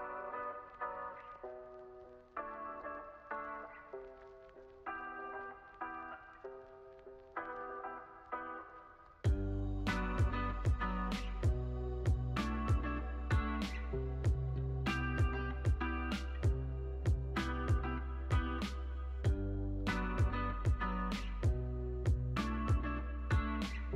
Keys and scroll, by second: 3.8 space, 11.2 space.